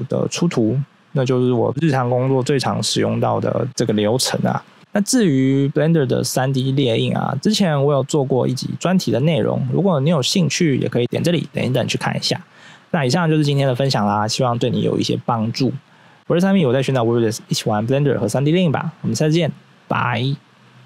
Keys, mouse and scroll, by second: 3.1 scroll down 1, 5.1-5.4 scroll down 1.